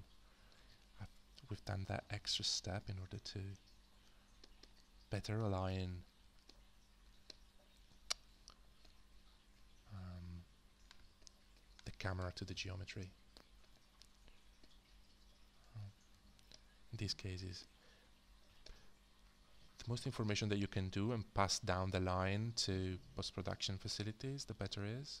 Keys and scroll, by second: 12.2 h, 16.3 f.